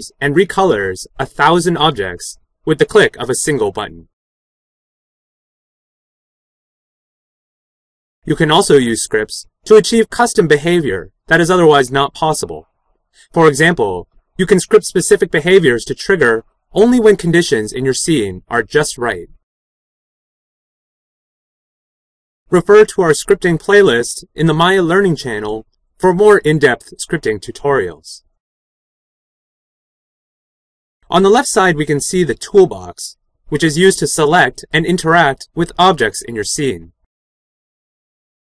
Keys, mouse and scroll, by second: 18.5 click.